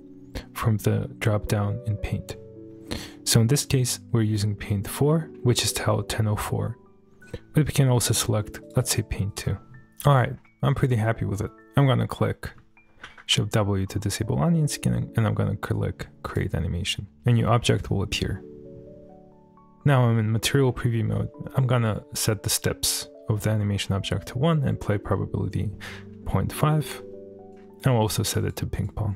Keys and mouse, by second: 4.1 middle click, 4.7 middle click, 5.3 middle click, 5.9-7.8 middle drag, 8.6-9.6 drag, 13.1 shift+w, 13.6 middle click, 16.3 click, 19.7 middle click, 20.2-20.5 shift+middle drag, 21.1 shift+middle click, 28.4 click.